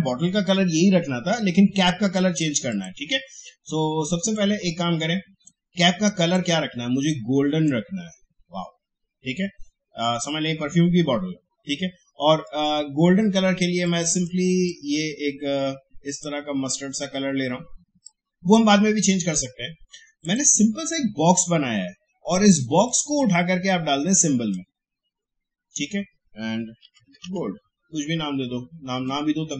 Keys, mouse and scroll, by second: 2.7-10.2 drag, 12.4-26.8 drag, 26.6-28.7 typing, 28.9 click.